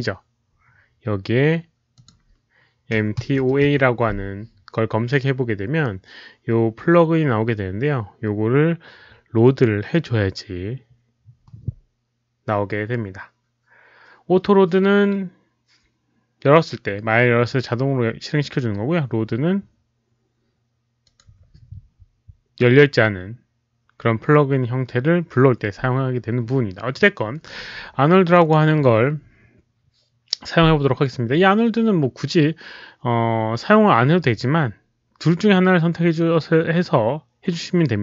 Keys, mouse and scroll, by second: 1.9 click, 2.7-4.1 typing, 3.0 click, 10.1-10.9 typing, 10.4 click, 21.0 click, 28.3 click.